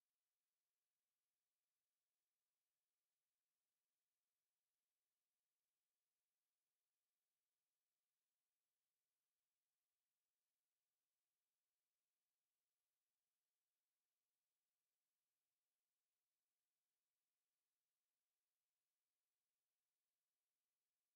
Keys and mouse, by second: 0.8-3.2 right drag, 2.3 f, 6.2 a, 9.2 Tab, 10.0-11.8 drag, 12.6 Tab, 13.9-15.7 middle drag, 15.7 KP_4, 16.9 KP_1.